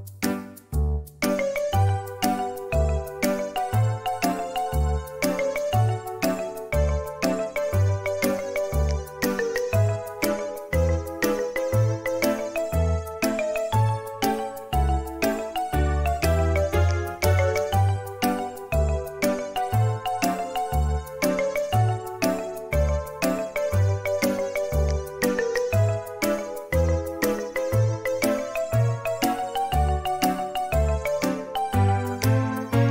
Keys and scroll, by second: 2.2 space, 9.3 ;, 9.8 ;, 12.7 `, 15.8 space, 18.7 ▯, 24.1 space, 30.1 typing, 30.9 Return.